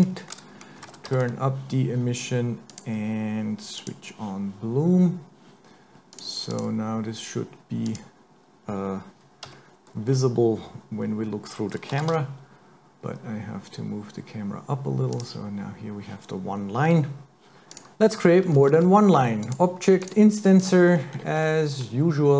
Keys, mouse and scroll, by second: 2.7 click, 3.9 click, 4.6 scroll down 1, 4.9-6.1 scroll up 2, 6.1 click, 6.5 click, 7.9 click, 8.8-9.5 scroll down 1, 9.5 scroll down 1, 9.5 KP_3, 10.1-11.0 scroll down 1, 11.0-11.9 scroll down 1, 11.9-12.4 scroll down 1, 11.9 g, 17.5 click, 17.7 click, 18.7 shift+a, 20.9-21.5 scroll up 9, 21.5 middle click.